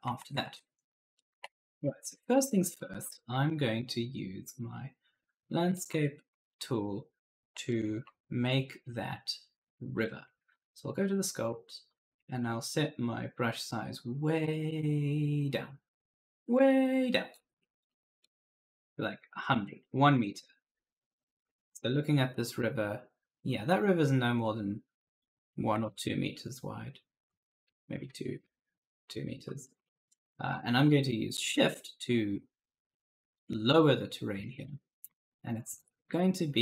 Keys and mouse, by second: 0.0 alt+Tab, 1.1-3.1 typing, 1.3 right click, 4.4 click, 5.6 right click, 5.7 s, 6.1 a, 7.5 right click, 7.7 s, 9.8 click, 13.0 click, 17.7 click, 18.4 0, 18.6 Return, 19.7 right click, 20.1-21.5 typing, 25.6 alt+Tab, 27.1 click, 27.9-30.7 typing, 29.5 right click, 33.2 click, 34.8 ctrl+z, 35.1 shift+click.